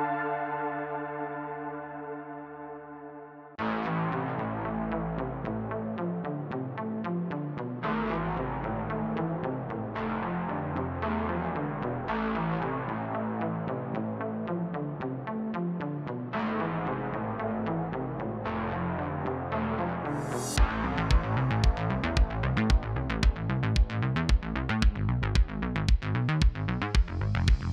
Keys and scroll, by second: 0.7-1.1 typing, 2.1-2.5 typing, 4.7-5.2 typing, 8.8 w, 12.3 w, 12.8 x, 15.2-18.0 typing, 21.0-24.6 typing.